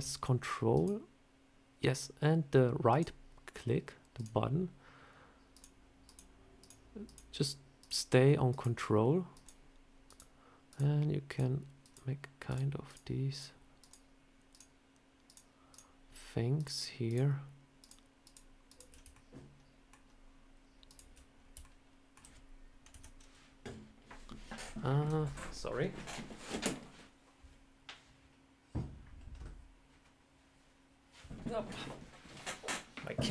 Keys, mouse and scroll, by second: 0.6 ctrl+right click, 5.2 ctrl+right click, 19.0 ctrl+middle click, 20.7 ctrl+right click, 21.5 alt+middle click, 22.8 KP_1, 24.6-25.8 scroll down 1.